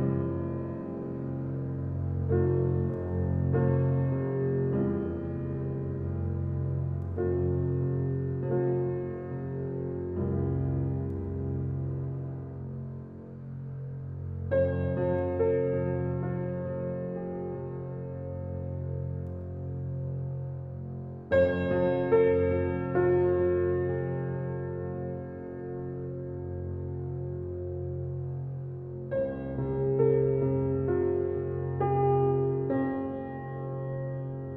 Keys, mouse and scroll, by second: 0.9 scroll up 1, 1.4 alt+middle click, 1.8 alt+click, 2.4 alt+right click, 2.8 alt+middle click, 3.4-6.1 alt+right drag, 6.1 click, 9.1 w, 9.7-13.4 drag, 13.4 scroll down 1, 14.0-16.0 alt+drag, 16.0 r, 16.7 click, 17.2 w, 17.7 click, 18.9 alt+middle click, 19.8 click, 20.8 t, 21.8 click, 22.8 alt+click, 24.2-24.6 scroll up 1, 24.8 alt+middle click, 25.3 alt+right click, 25.8 alt+middle click, 27.6 click.